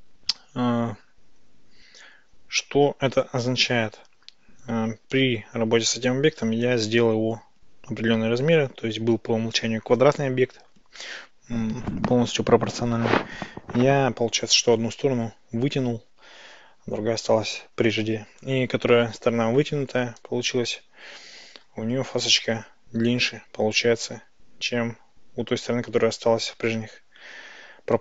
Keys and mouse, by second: 5.2 Tab, 20.3 Tab, 21.6 ctrl+shift+b.